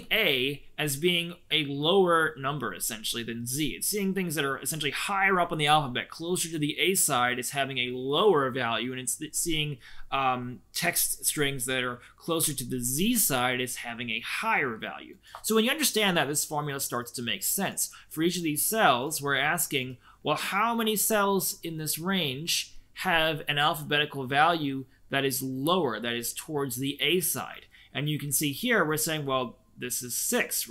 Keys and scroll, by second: 18.8 Escape, 28.2 Escape.